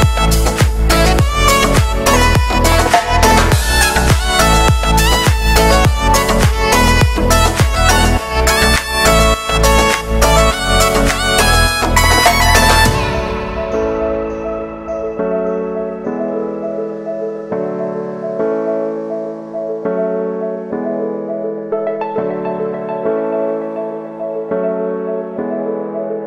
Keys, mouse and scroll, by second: 1.4 shift+right click, 1.6 s, 6.4 scroll up 1, 6.6 shift+middle click, 6.9-7.3 scroll up 1, 7.3 right click, 7.5 shift+middle click, 8.4 shift+right click, 9.2 ctrl+shift+b, 12.7 alt+shift+right click, 13.5 alt+shift+right click, 13.9 s, 16.8 e, 18.8 ctrl+KP_Add, 19.4 shift+n, 20.5 alt+e, 23.4 ctrl+KP_Add, 23.6 ctrl+KP_Add, 23.8 g, 25.1 scroll down 1, 25.4 middle click, 26.0-26.2 scroll up 1.